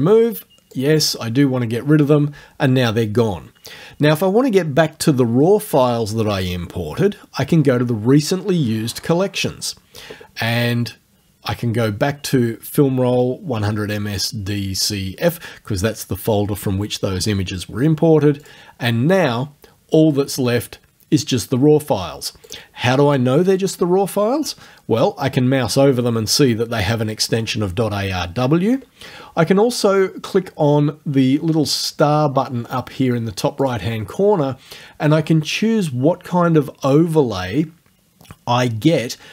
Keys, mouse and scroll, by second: 0.8 click, 9.4 click, 18.4 click, 22.5 click, 33.7 click.